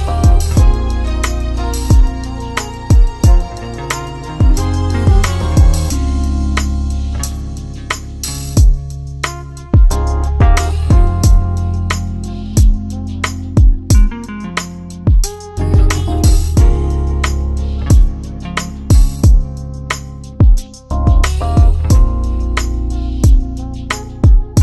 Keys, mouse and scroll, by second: 0.8 click, 3.5 ctrl+c, 3.8 ctrl+v, 4.3 click, 9.8 click, 11.4 click, 13.5 click, 17.4 click, 21.1 click.